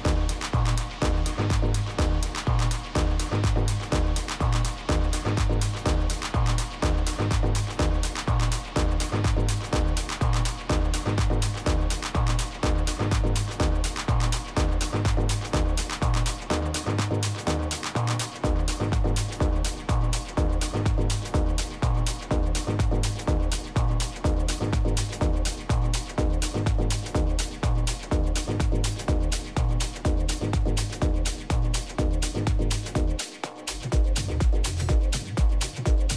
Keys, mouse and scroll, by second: 1.5-2.2 scroll up 1, 2.2-7.1 middle drag, 11.5 middle click, 13.0 KP_3, 13.6 z, 16.8-20.9 middle drag, 20.9-24.1 right drag, 21.5 a, 24.2 middle click, 28.1-30.1 drag.